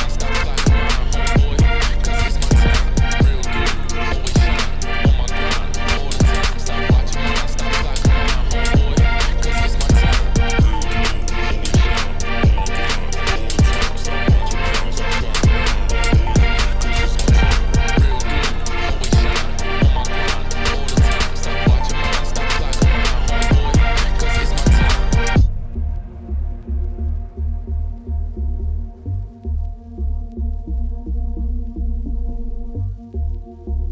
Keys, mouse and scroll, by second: 1.1 click, 2.0-3.2 shift+drag, 3.2 scroll up 1, 3.6 Tab, 3.7-4.9 right drag, 5.1 click, 6.4 click, 6.7 ctrl+2, 8.1 shift+click, 8.9 scroll down 4, 9.1 click, 9.2 middle click, 10.1 click, 10.3 scroll up 1, 11.3-12.5 shift+drag, 13.0 click, 13.1 middle click, 13.3 scroll down 2, 13.5 middle click, 14.3 scroll down 4, 14.6-14.9 scroll up 5, 14.9-16.2 middle drag, 16.2 click, 18.7-20.4 middle drag, 20.4 ctrl+r, 20.8 Tab, 21.1 middle click, 21.5 Tab, 22.0 g, 22.6 middle click, 23.0 KP_Divide, 23.3 scroll down 1, 23.5 middle click, 23.7 ctrl+r, 23.9 Tab, 24.1 ctrl+r, 26.1 ctrl+r, 27.1 ctrl+r, 27.7 middle click, 28.0 ctrl+r, 28.8 s, 30.1 middle click, 30.2 Tab, 30.4 ctrl+2, 30.6 right click, 31.0 middle click, 31.4 Tab, 31.8 ctrl+r, 32.9 s.